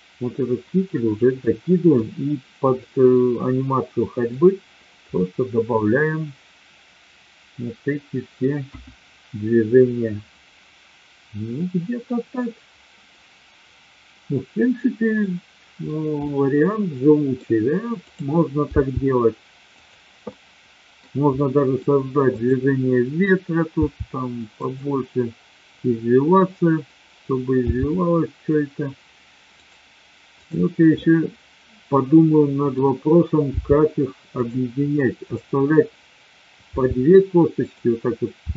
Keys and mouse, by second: 1.5-1.8 middle drag, 2.8-4.2 middle drag, 5.1-8.4 middle drag, 8.6 KP_1, 15.2-15.7 middle drag, 16.1-17.2 middle drag, 18.7 g, 20.2-21.0 middle drag, 21.4-21.7 middle drag, 22.2-23.2 drag, 23.7 r, 24.6 click, 27.6 g, 30.5-31.4 drag, 31.4-32.7 middle drag, 33.6 g, 36.7 g, 37.6 click, 38.4 r.